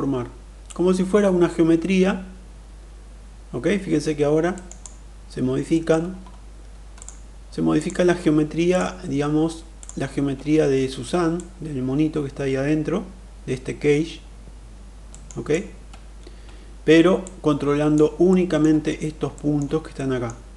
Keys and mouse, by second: 0.5-4.5 drag, 4.5 middle click, 4.6 click, 5.6 middle click, 6.9 click, 7.6 click, 8.5 shift+click, 9.6 shift+click, 11.2-15.0 drag, 15.0 middle click, 15.2 click, 17.0 click, 18.1 middle click, 19.1 middle click, 19.7 middle click.